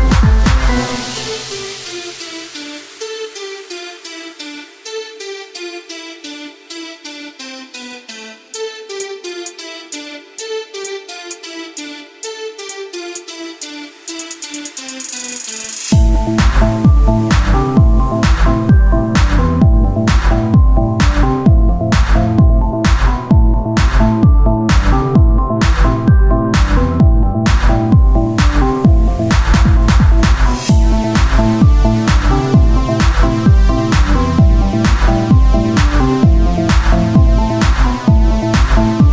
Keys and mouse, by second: 4.5 Tab, 5.8 KP_3, 6.7 ctrl+Tab, 7.8-8.9 drag, 8.5 c, 9.1-10.6 drag, 11.9-13.1 drag, 12.6 ctrl+z, 13.1 z, 13.5 c, 16.4-18.4 drag, 16.4-18.4 right drag, 19.0 z, 19.7 Tab, 23.2 click, 23.6 KP_1, 25.7 Tab, 27.7 KP_7, 28.3 z, 28.9 c, 29.7 click, 31.9-33.1 drag, 32.7 x, 34.0 z, 35.2 ctrl+Tab, 36.5-37.9 drag, 37.5 f, 37.9 KP_1, 38.4 ctrl+Tab, 39.0 z.